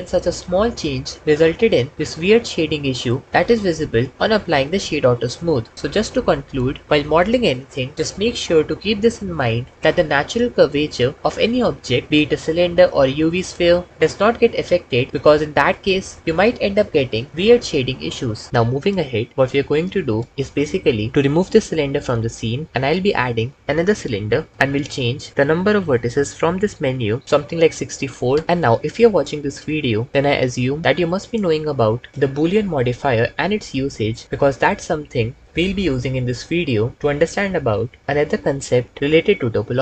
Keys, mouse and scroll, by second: 21.8 x, 23.3 shift+a, 26.9-28.3 drag.